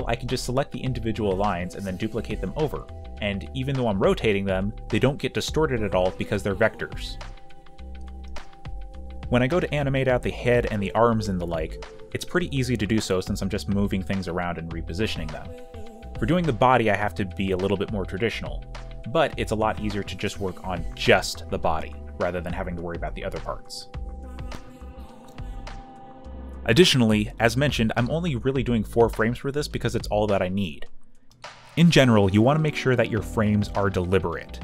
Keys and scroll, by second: 0.7-2.4 typing, 5.7 y, 6.6 space, 8.9-12.3 typing, 13.8-15.5 typing, 16.6 b, 20.5 b, 21.0 ., 24.5-26.8 typing, 27.8 ctrl+shift+h, 28.9 w, 31.9 ctrl+d, 33.6 q, 33.8 e, 34.1 space.